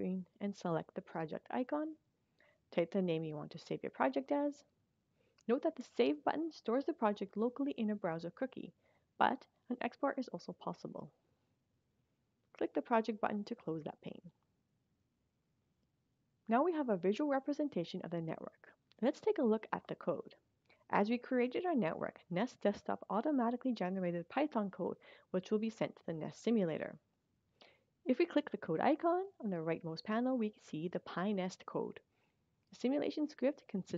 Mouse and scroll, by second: 2.7 click, 11.3 click, 15.1 click, 28.4 click.